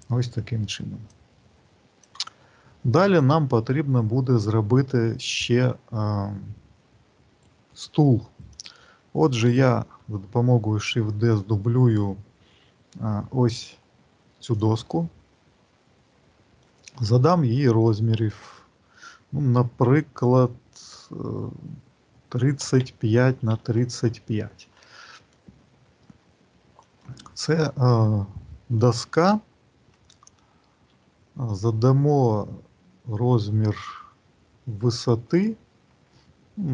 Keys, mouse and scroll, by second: 0.9 click, 8.4 click, 10.5 shift+d, 15.5-18.0 scroll up 2, 18.0 click, 25.9 middle click, 27.9 middle click, 30.0 g, 36.0 shift+middle click.